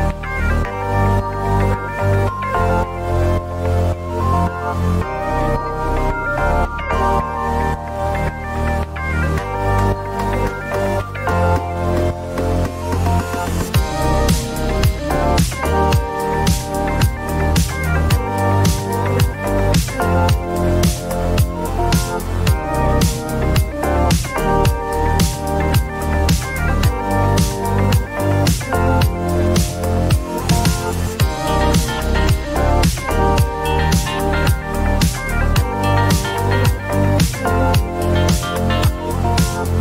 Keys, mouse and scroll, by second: 2.9 click, 4.8 click, 5.8-8.0 typing, 9.7-12.7 drag, 13.7 click, 14.6-17.1 drag, 15.3 ctrl+d, 17.4-21.7 drag, 23.3-26.8 drag, 28.4-31.1 drag, 33.0-35.6 drag, 33.6-35.7 typing, 37.3 click, 37.4 click.